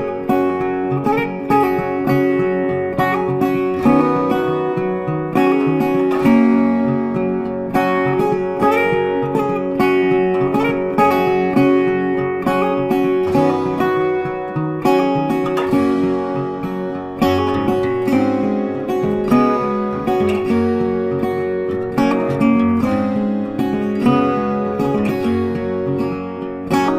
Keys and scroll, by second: 18.5 ctrl+z, 20.1 ctrl+z.